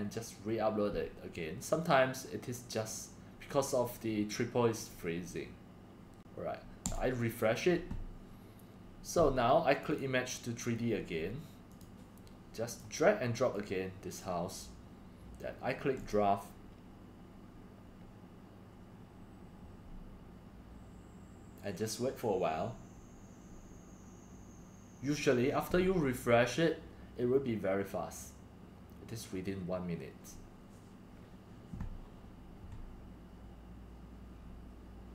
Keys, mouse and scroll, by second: 6.8 click, 12.8 Insert.